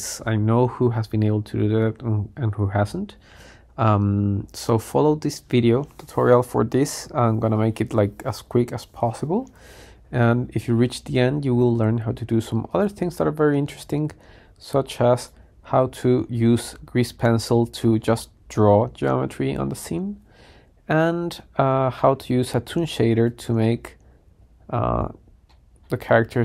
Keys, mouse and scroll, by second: 4.8-7.7 middle drag, 12.9 click, 16.3-16.9 scroll down 1, 16.9-20.6 middle drag, 16.9 scroll down 1, 20.6-23.6 scroll down 1, 23.6 click, 23.6 scroll down 1, 24.6-25.6 scroll up 5, 25.2 middle click, 25.9-26.4 middle drag.